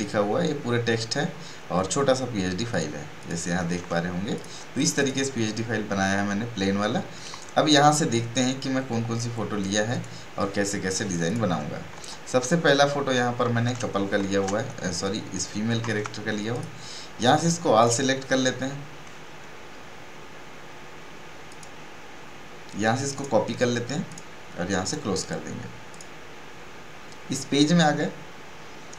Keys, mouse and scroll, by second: 0.9 scroll down 1, 2.7 click, 4.6 space, 4.7 right click, 5.0 click, 8.4-9.9 drag, 14.2 ctrl+shift+e, 16.5 click, 21.5 click.